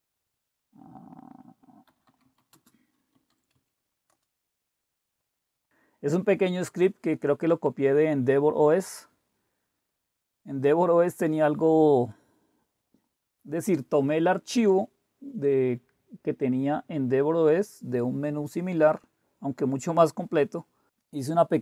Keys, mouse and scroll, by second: 1.8-3.8 typing, 4.1 Return, 21.1-21.6 scroll down 1.